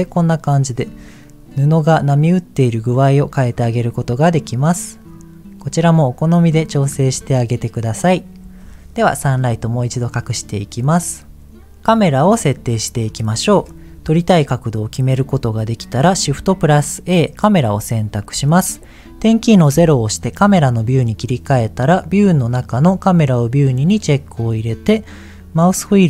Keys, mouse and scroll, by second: 0.4 middle click, 2.8 click, 4.2 middle click, 5.1 click, 6.4 middle click, 10.3 click, 11.1 scroll up 2, 11.9 middle click, 13.2 shift+middle click, 14.1-15.1 middle drag, 16.2 shift+a, 19.7 KP_0, 22.1 click, 23.5 click, 25.8-26.0 scroll down 1.